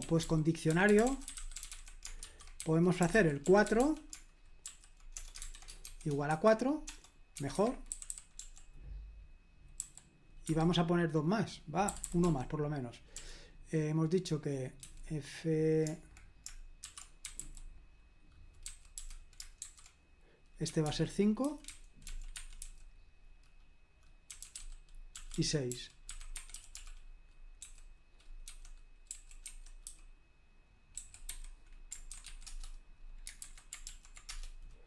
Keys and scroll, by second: 0.0-8.6 typing, 7.5 Escape, 10.4 Escape, 11.6-13.1 typing, 14.8 typing, 16.6-22.6 typing, 24.0-32.7 typing, 33.4 super+h, 33.8 ctrl+p, 34.3 Return.